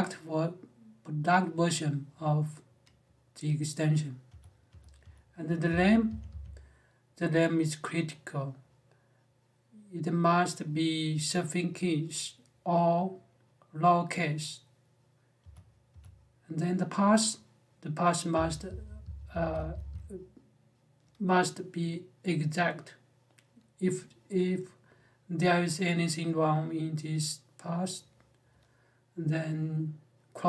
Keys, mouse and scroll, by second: 4.0-6.0 typing, 15.2 j, 15.7 j, 18.1-19.7 typing.